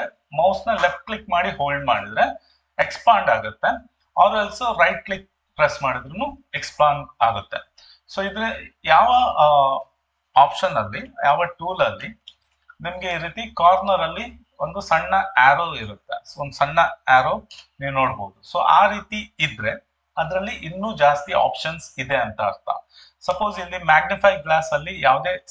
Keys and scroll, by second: 17.5 Escape.